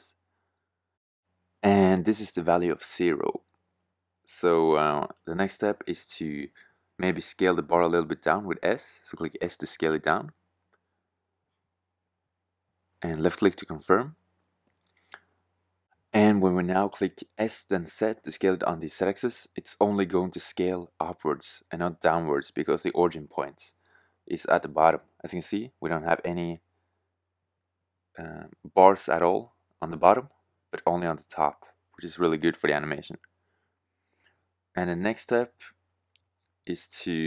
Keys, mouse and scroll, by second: 2.1 Tab, 6.7 middle click, 10.3 s, 13.2 middle drag, 13.4 drag, 13.7-14.2 drag, 14.7 s, 16.2 click, 23.4-24.8 drag, 25.1 click, 25.4-25.7 middle drag, 25.8 s, 27.5-27.9 middle drag, 31.2-33.9 middle drag, 34.4 s.